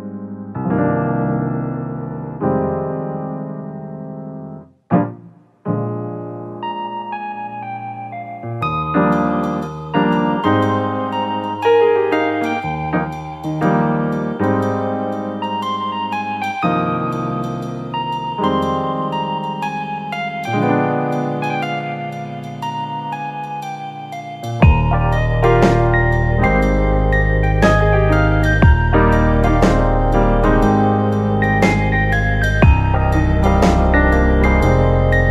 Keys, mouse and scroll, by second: 0.3 alt+shift+click, 1.4 middle click, 2.2 KP_1, 3.7 click, 5.4 click, 7.1 click, 8.1 click, 10.4 click, 11.5 alt+shift+click, 12.4 middle click, 12.9 e, 16.1 Tab, 16.3-17.5 right drag, 17.5 scroll up 1, 17.7 Tab, 18.0-19.5 middle drag, 19.5 s, 20.7-22.1 middle drag, 22.1 s, 23.3 s, 24.0 scroll up 1, 24.2-26.5 middle drag, 26.5 s, 28.6 middle click, 29.0-29.3 scroll up 2, 29.3 shift+middle click, 30.3 ctrl+r, 32.0 ctrl+r, 33.4 middle click, 34.4 ctrl+r.